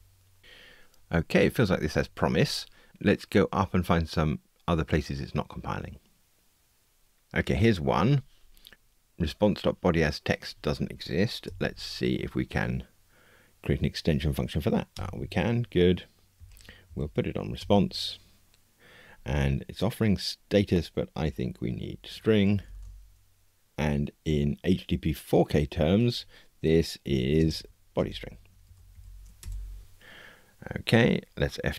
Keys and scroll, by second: 11.4 alt+Return, 28.0 Return.